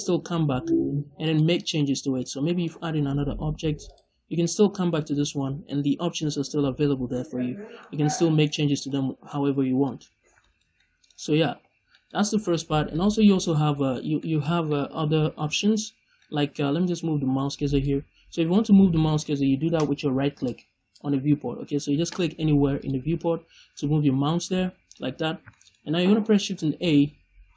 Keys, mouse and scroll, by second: 1.7 middle click, 2.6-3.2 scroll up 1, 4.3 right click, 4.6 scroll down 2, 4.7-8.0 middle drag, 8.5 shift+middle click, 8.9-9.2 scroll up 2, 9.2 middle click, 10.1 scroll down 2, 10.2 scroll up 2, 10.3 shift+middle click, 12.8 drag, 13.1 scroll down 2, 13.3 middle click, 13.8 scroll up 2, 14.1 middle click, 17.6 click, 22.7 click, 25.4 shift+middle click, 25.7 scroll up 1, 26.2 middle click, 26.7 shift+a.